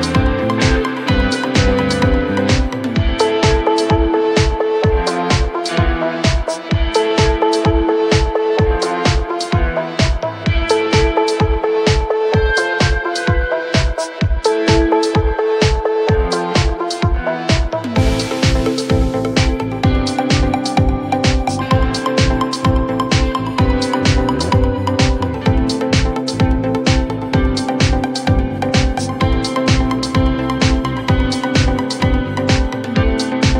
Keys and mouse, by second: 0.9 click, 1.2 click, 1.4 click, 1.6 click, 2.1 click, 2.2 alt+click, 2.6 click, 3.5 click, 3.9 click, 4.1 click, 4.6 click, 5.0 click, 5.5 3, 6.2-7.5 alt+drag, 8.6 click, 10.2 click, 10.9-13.7 drag, 14.2-16.0 drag, 18.3 4, 19.0 click, 20.0 middle drag, 20.4 click, 22.3 alt+middle click, 24.5 click, 25.2 alt+click, 25.7 click, 26.3 3, 29.1 click, 29.9-30.9 alt+drag, 32.7 alt+click.